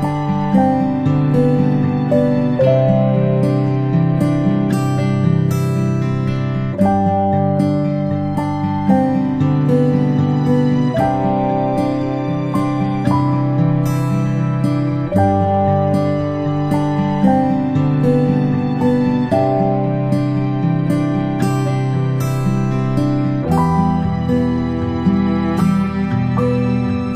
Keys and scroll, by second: 5.9-6.3 space, 13.1-14.3 space, 14.4 space, 14.7 space, 17.5 space, 25.3 space.